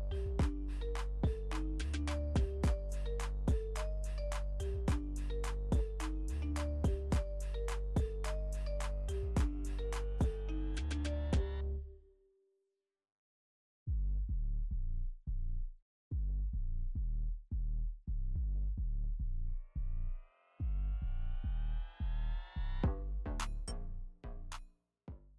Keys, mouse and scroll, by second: 0.1-0.5 alt+scroll down 1, 1.5 ctrl+t, 2.1-6.0 drag, 6.0-6.3 alt+scroll down 1, 7.6-9.5 alt+shift+drag, 9.5-9.8 alt+scroll up 1, 10.7-17.3 drag, 17.9 Return, 20.2 click, 21.1 typing, 23.9 typing.